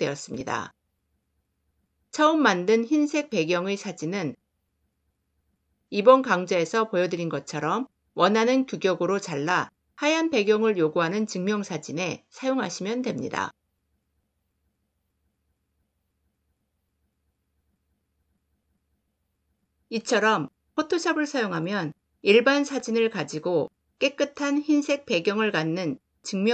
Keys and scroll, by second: 5.7 c, 14.7 Return, 16.9 ctrl+0.